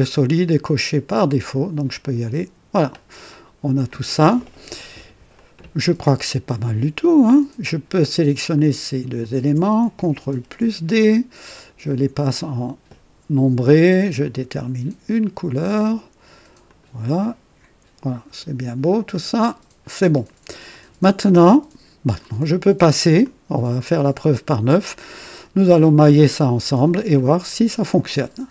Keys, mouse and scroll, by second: 2.0 click, 3.3 click, 5.3-7.3 drag, 8.5 click, 9.2 ctrl+click, 10.4 ctrl+d, 11.6 ctrl+click, 12.3 click, 14.2 click, 15.5 click, 16.7 click, 17.2 click, 19.1 click, 20.7-22.4 drag, 22.7 right click, 23.2 click.